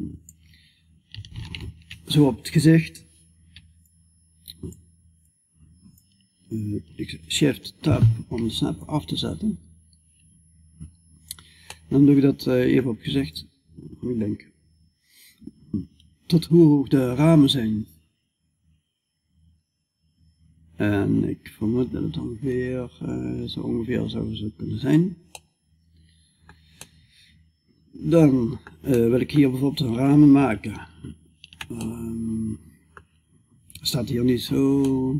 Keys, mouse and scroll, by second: 11.1-12.8 middle drag, 12.8-24.4 drag, 24.9-34.3 middle drag, 34.3-35.1 middle drag.